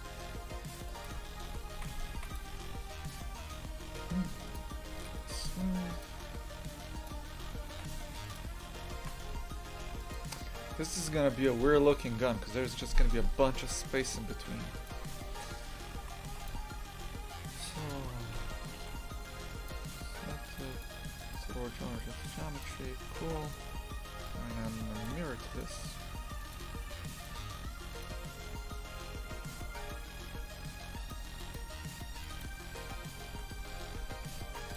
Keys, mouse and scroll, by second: 1.1 Tab, 1.7 shift+f, 4.5 w, 7.0 click, 7.7 shift+f, 9.0 shift+f, 14.9 click, 16.0 shift+f, 19.7 shift+s, 20.6 click, 22.6 click, 23.1 shift+f, 26.5-29.8 drag, 29.8-32.4 right drag, 32.4 click, 33.3 shift+f.